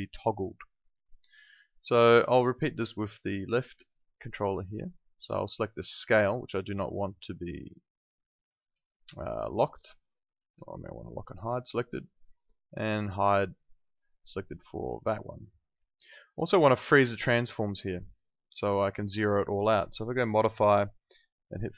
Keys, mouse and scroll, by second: 2.0 click, 7.2 right click, 11.4 click, 12.9 right click, 14.1 click, 20.3 click.